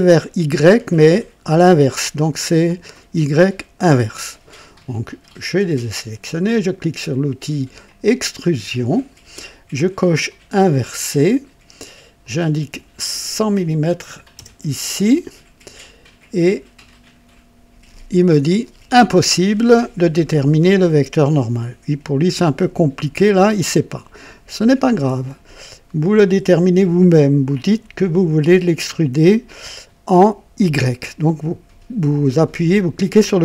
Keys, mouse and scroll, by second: 7.8 click, 10.6 click, 12.2 click, 14.3 alt+KP_0, 16.4 click, 23.6 click, 30.5 click.